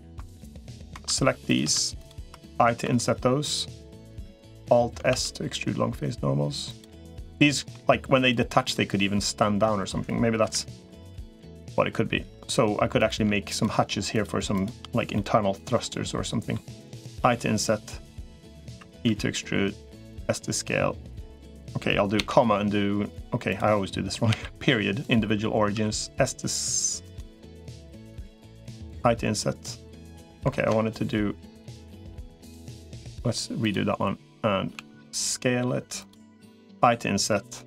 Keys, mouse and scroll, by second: 1.3 shift+click, 2.7 i, 4.9 alt+s, 6.8 middle click, 10.3 KP_Decimal, 11.4 middle click, 13.3 shift+click, 13.9 shift+click, 14.3 shift+click, 14.9-16.3 middle drag, 17.9 i, 18.9 e, 20.1 s, 25.5 s, 28.7 i, 30.3 ctrl+z, 32.9 click, 34.5 s, 36.5 i.